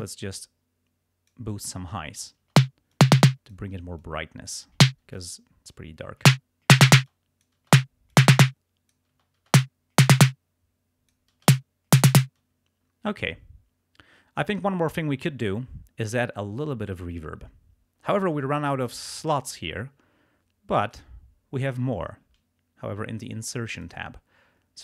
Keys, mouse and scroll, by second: 2.0 space, 3.0 click, 3.8 space, 4.0 click, 4.7 space, 5.2 click, 6.2 space, 7.0 space, 7.1 click, 8.2 click, 9.1 space, 10.1 space, 10.1-11.3 drag, 11.4 space, 12.4 space, 20.9 click, 23.7 click.